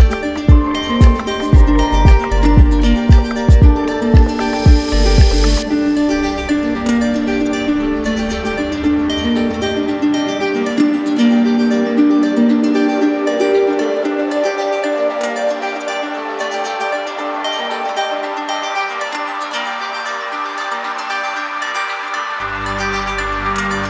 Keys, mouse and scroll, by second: 0.0 shift+click, 0.2 click, 0.3 shift+click, 0.4 shift+click, 0.4 alt+right click, 0.5 alt+click, 0.5 alt+click, 0.6 alt+click, 0.7 click, 0.8 click, 0.9 shift+click, 0.9 right click, 0.9 right click, 1.0 alt+right click, 1.2 shift+click, 1.3 click, 1.3 shift+click, 1.4 shift+click, 1.4 alt+right click, 1.7 shift+click, 1.8 shift+click, 2.0 click, 2.2 alt+click, 2.2 click, 2.3 shift+click, 2.4 shift+click, 2.7 click, 2.8 shift+click, 2.9 alt+right click, 3.0 alt+right click, 3.2 alt+right click, 3.3 alt+click, 3.6 z, 3.7 right click, 3.8 shift+click, 4.0 shift+right click, 4.2 right click, 4.3 z, 4.5 right click, 4.6 right click, 4.6 shift+click, 4.7 shift+click, 5.0 right click, 5.1 right click, 5.2 alt+click, 5.2 alt+click, 5.3 right click, 5.5 alt+click, 5.5 right click, 5.7 click, 5.8 right click, 5.8 shift+click, 6.0 right click, 6.0 shift+click, 6.0 alt+middle click, 6.2 click, 6.5 right click, 6.8 click, 6.9 right click, 7.0 right click, 7.1 right click, 7.1 right click, 7.3 click, 7.4 right click, 7.7 right click, 7.8 alt+right click, 7.9 alt+click, 8.0 click, 8.2 click, 8.2 alt+right click, 8.3 right click, 8.3 alt+click, 8.5 alt+click, 8.6 alt+click, 8.7 click, 8.8 shift+click, 8.9 click, 9.0 alt+right click, 9.0 right click, 9.2 right click, 9.2 alt+click, 9.3 right click, 9.3 click, 9.5 click, 9.6 shift+click, 9.7 right click, 9.8 right click, 9.9 click, 9.9 right click, 10.0 shift+click, 10.0 shift+click, 10.1 shift+click, 10.3 alt+click, 10.4 shift+click, 10.5 alt+click, 10.6 shift+click, 10.8 shift+click, 11.0 shift+click, 11.1 right click, 11.2 right click, 11.3 click, 11.4 right click, 11.5 click, 11.6 right click, 11.6 shift+click, 11.6 shift+click, 11.7 click, 11.8 click, 11.8 right click, 12.1 click, 12.1 alt+click, 12.2 click, 12.3 alt+click, 12.4 right click, 12.6 right click, 12.8 click, 12.9 click, 13.0 click, 13.1 right click, 13.8 click, 14.8 click, 16.1 click, 18.7 click, 22.6 click.